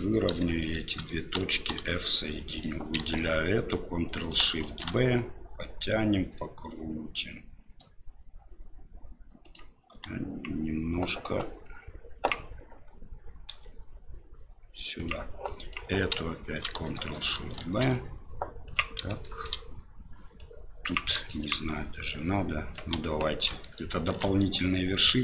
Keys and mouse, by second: 0.6 right click, 1.7 f, 2.5 right click, 4.6 ctrl+shift+b, 9.9 g, 11.4 click, 13.5 g, 15.4 click, 17.6 ctrl+shift+b, 19.2 shift+click, 20.5 click, 21.3 shift+click, 22.2 shift+click, 24.1 ctrl+shift+b.